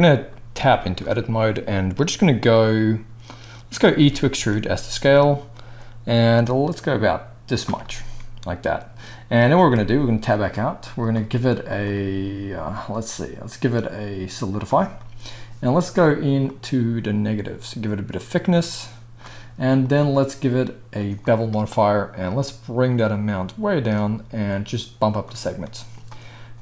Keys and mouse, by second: 0.5 Tab, 3.9 e, 7.7-10.9 middle drag, 9.6 Tab, 10.9 click, 11.1-11.6 middle drag, 11.6-26.6 drag.